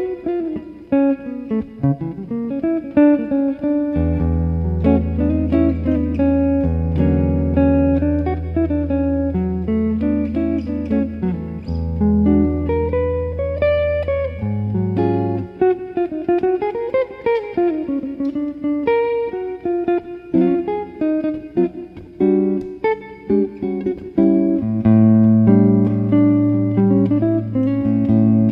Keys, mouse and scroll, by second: 0.0 click, 1.7-7.3 middle drag, 5.8-8.8 drag, 12.3-14.3 middle drag, 12.5 right click, 14.3 click, 21.0 click, 24.2-27.2 middle drag, 27.2 click.